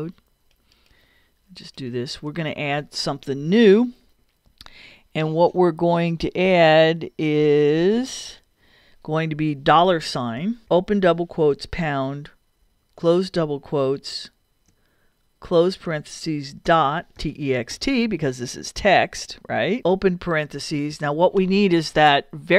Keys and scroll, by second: 2.4 BackSpace, 10.4 shift+4, 10.7 shift+', 11.5 shift+3, 12.6 shift+', 15.5 shift+0, 16.7 shift+., 20.1 shift+9.